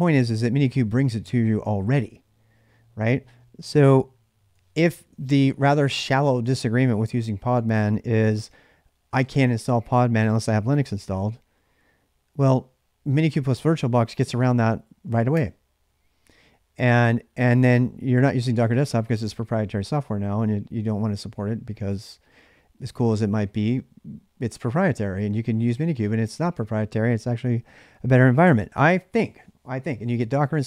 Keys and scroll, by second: 5.0 ctrl+[, 5.0-7.1 typing, 10.6-11.4 typing.